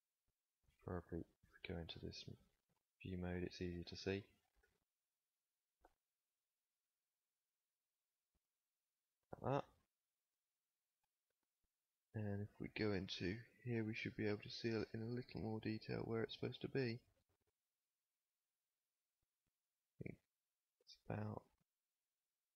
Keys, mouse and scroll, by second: 0.5 KP_1, 4.5 s, 8.8 z, 11.0 KP_7, 18.8 g.